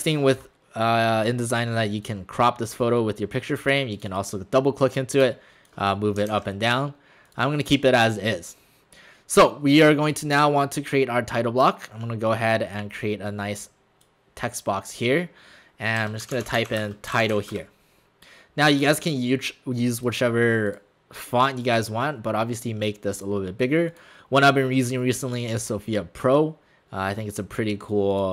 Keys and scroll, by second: 6.3 ctrl+shift+z, 16.0-17.8 typing.